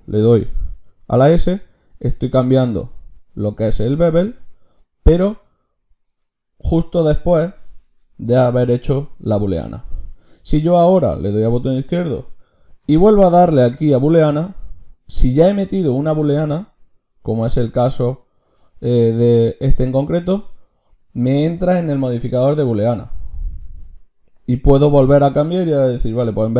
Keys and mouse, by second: 9.1-12.7 drag, 12.7 ctrl+shift+q.